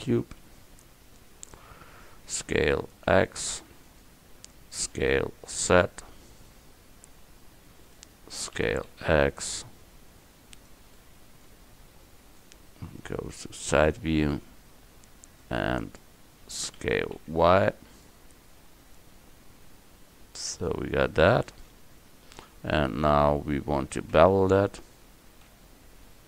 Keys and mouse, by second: 1.2 click, 2.3 s, 5.0 s, 8.6 s, 11.4 middle click, 12.4-14.5 drag, 16.9 s, 24.2 Tab, 25.6 a.